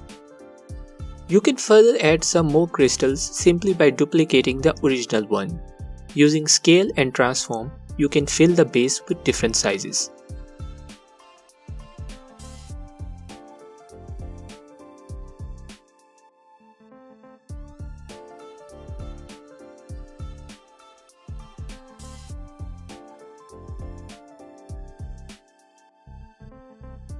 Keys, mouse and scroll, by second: 3.2 shift+click, 8.1 shift+d, 9.1 click, 10.6 space, 10.7 t, 13.3 click, 14.6-21.5 drag, 19.9 s, 22.3-27.1 drag.